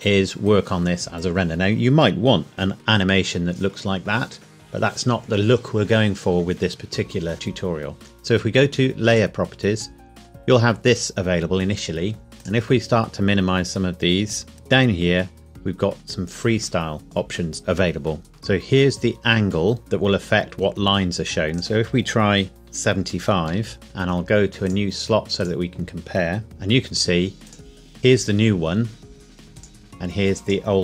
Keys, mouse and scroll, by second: 2.7 F11, 8.0 click, 11.5-12.3 scroll up 1, 12.4 click, 21.5 click, 22.6 KP_5, 23.5 KP_Enter, 24.6 click, 29.5 click.